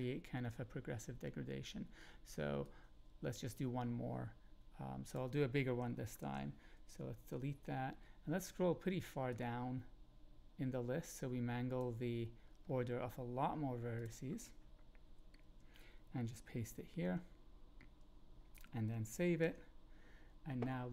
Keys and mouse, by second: 2.6-7.2 drag, 6.2 ctrl+x, 7.2 BackSpace, 9.3 click, 9.4-10.3 middle drag, 10.3 click, 10.4-11.7 middle drag, 11.7 click, 14.0 click, 15.0 Return, 15.4 Up, 16.7 ctrl+v, 19.4 alt+s.